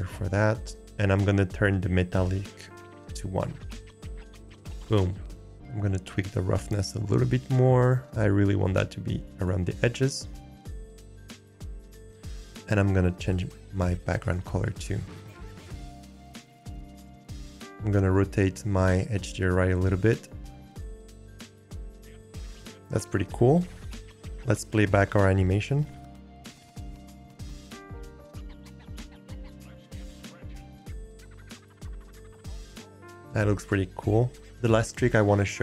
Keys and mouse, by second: 2.2-5.4 drag, 5.8 click, 10.5 click, 12.3 n, 13.3 click, 19.1 click, 21.2 click, 22.1 click, 24.6 click, 25.9 click, 28.3 click, 29.5 middle click, 30.3 click, 31.4 click, 31.9 click, 32.4 click, 33.1 ctrl+s.